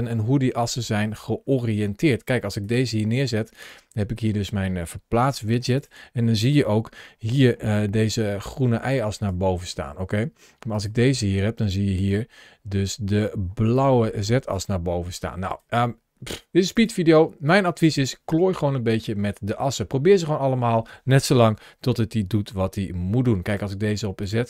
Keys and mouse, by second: 5.0 g, 5.6 click, 7.4 ctrl+alt+shift+3, 7.8 ctrl+shift+a, 12.5 ctrl+shift+a, 13.3 ctrl+alt+shift+1, 15.3 click, 21.2 g, 23.3 click, 24.0 click.